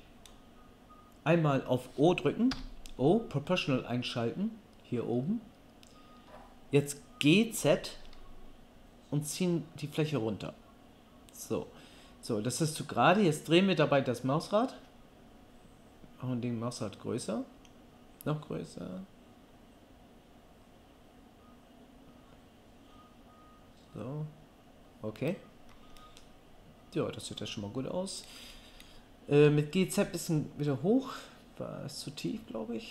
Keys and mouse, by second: 2.5 o, 7.6 g, 10.6-32.9 middle drag, 29.3 g.